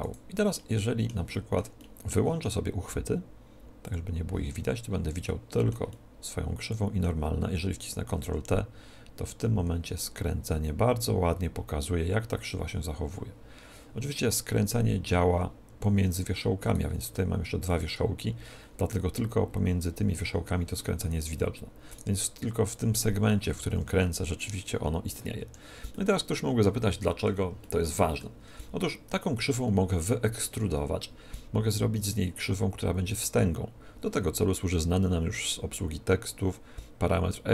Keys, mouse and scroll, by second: 0.0-1.7 right drag, 0.5-3.5 middle drag, 4.5-5.7 drag, 5.6-7.7 middle drag, 8.0 ctrl+t, 16.6-19.4 right drag, 19.4 middle click, 21.8-23.6 right drag, 23.6 ctrl+t, 25.8-29.2 middle drag, 28.3 Tab.